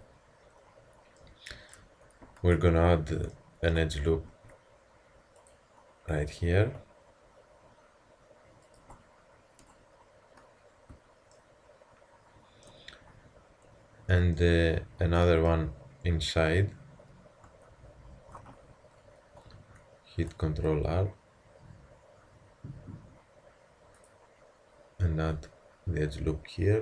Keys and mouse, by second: 4.3 ctrl+r, 10.9 Tab, 17.5 Tab, 18.6 z, 19.6 ctrl+r.